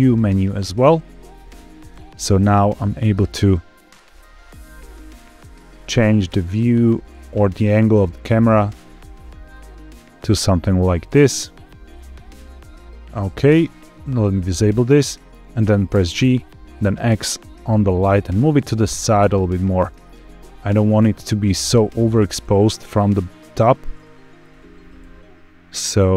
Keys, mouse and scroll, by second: 1.2 click, 1.4 n, 2.1 middle click, 3.5-4.1 scroll down 1, 4.8 shift+middle click, 5.3 middle click, 7.2 middle click, 8.7 scroll down 1, 9.2 shift+middle click, 13.1 q, 14.5 click, 15.8 g, 16.2 x, 18.1 click, 19.2 click, 19.8 g, 20.0 x, 20.9 Escape, 21.7 click, 22.1 g, 22.3 x, 23.5 click, 24.3 click, 24.9 g, 24.9 x.